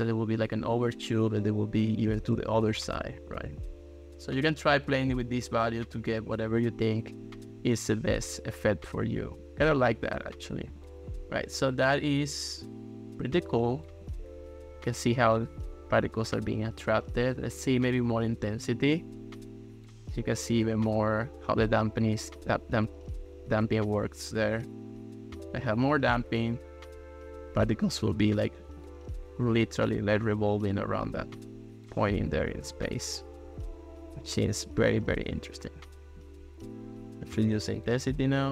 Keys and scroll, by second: 0.9 ctrl+s, 2.3 ctrl+x.